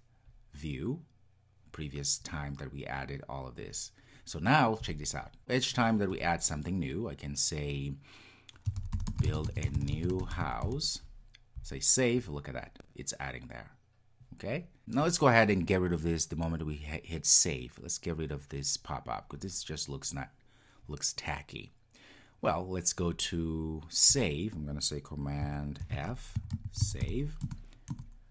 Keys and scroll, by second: 25.8 super+f, 26.5 super+f.